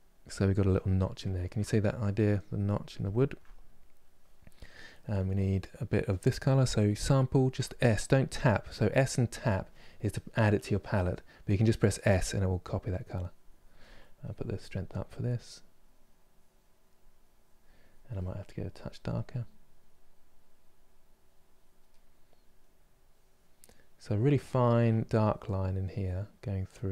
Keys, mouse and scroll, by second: 0.6-12.5 middle drag, 12.5-14.3 drag, 14.3 middle click, 15.0-18.5 drag, 19.2-21.5 drag, 21.5-22.6 middle drag, 22.6-24.2 drag, 24.2 shift+middle click, 24.9-26.9 drag.